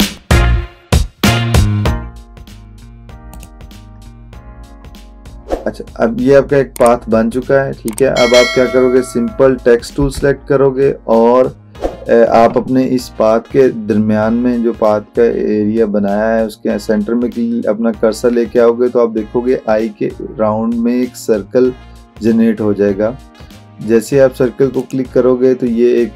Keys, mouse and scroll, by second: 0.4-0.9 click, 3.4 click, 10.0 t, 24.9 click.